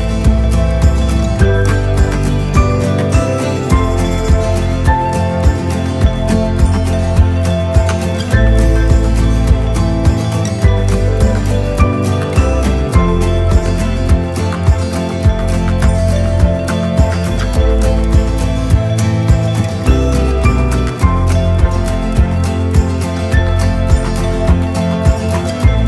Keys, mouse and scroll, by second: 2.5-7.1 drag, 7.9 click, 8.2-10.3 right drag, 10.7-11.5 scroll up 2, 12.1 click, 14.2-17.7 drag, 18.5-19.9 drag, 23.1 click, 24.3 3, 25.6 click.